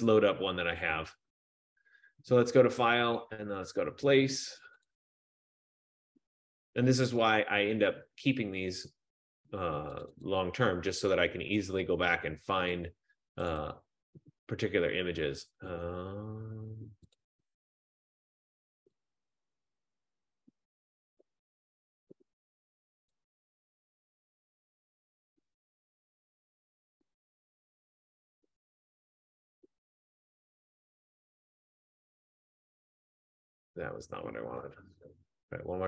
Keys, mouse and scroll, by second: 3.0 click, 5.0 click, 7.2 click, 10.2 click, 10.4 click, 13.7 click, 14.0 click, 16.7 F15, 17.4 click, 17.6 click, 19.3 click, 19.4 click, 23.4 click, 23.7 click, 30.3 click, 31.6 click, 34.7 Escape.